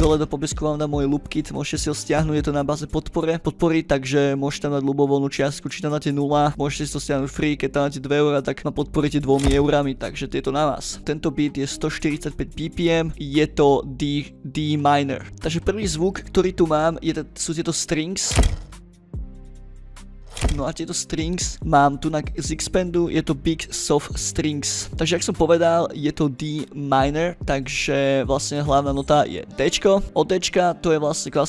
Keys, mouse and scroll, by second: 0.7 click, 5.0 click, 6.1 click, 8.9 click, 9.2 click, 13.1 ctrl+middle click, 13.1 ctrl+scroll, 15.4-16.7 scroll up 8, 16.7 ctrl+scroll down 2, 17.3 click, 20.4 click, 21.3 click, 22.3 drag, 24.8 click, 25.1 ctrl+middle click, 26.0 drag, 26.6 scroll up 2, 27.6 drag, 29.4 click, 29.9 ctrl+middle click, 30.0 scroll up 2, 30.3 ctrl+middle click.